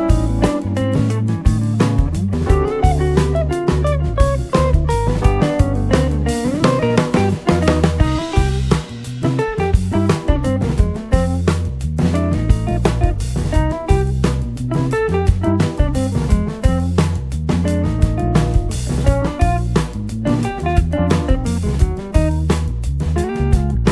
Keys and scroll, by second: 17.3-18.1 typing.